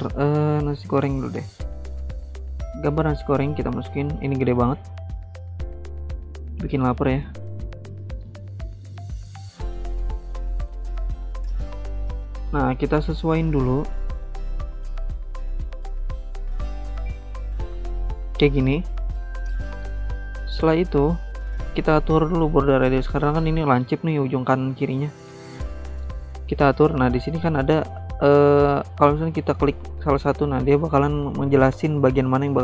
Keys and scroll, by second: 1.2 alt+Tab.